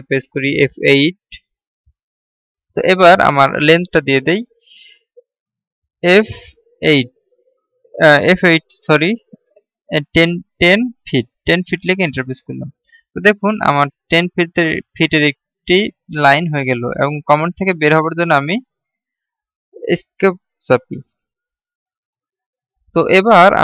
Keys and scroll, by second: 1.1 F8, 20.0 Escape.